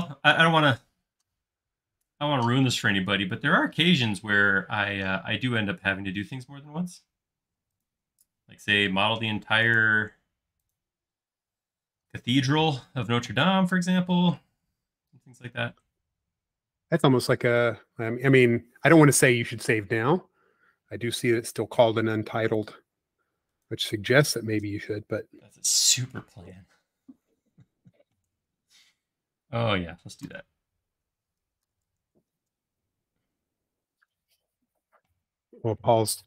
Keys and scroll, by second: 4.8 q, 11.2 space, 13.9 m, 30.8-32.8 typing.